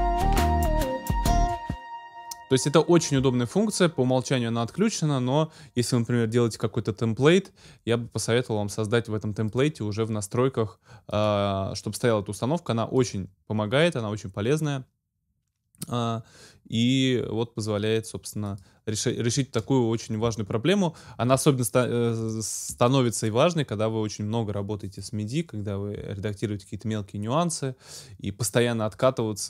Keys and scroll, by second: 1.4 space.